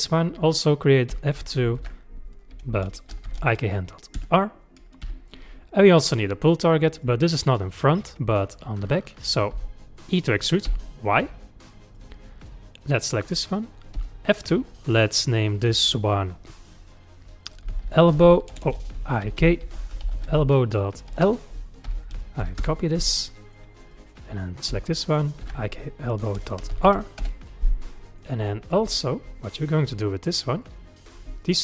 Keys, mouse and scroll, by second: 1.1 F2, 5.1 KP_3, 6.9 click, 9.6 e, 12.4 click, 13.9 F2, 18.7 BackSpace, 18.8 BackSpace, 23.2 middle click, 23.9 click, 24.7 F2, 28.0-30.3 middle drag, 30.3 click, 30.6 middle click, 31.4 shift+click.